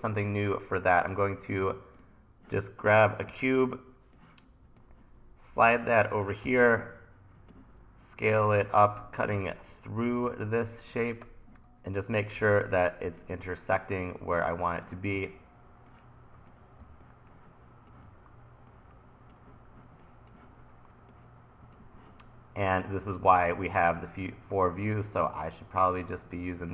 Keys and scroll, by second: 3.3 e, 6.5 t, 14.0 t, 15.2 e, 16.8 t, 18.1 e.